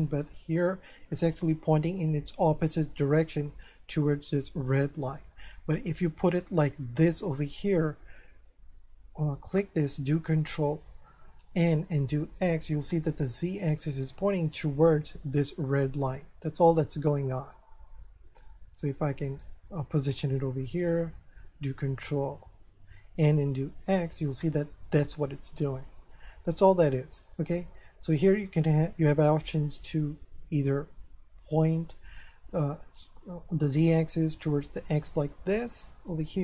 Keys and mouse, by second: 4.4 middle click, 5.9 right click, 7.3 click, 7.8 middle click, 9.3 right click, 10.4 ctrl+n, 12.2 click, 14.9 middle click, 18.9 right click, 20.2 click, 20.8 right click, 21.4 ctrl+n, 23.5 click, 24.2 middle click, 26.7 middle click, 27.8 ctrl+n, 34.4 click, 36.0 middle click.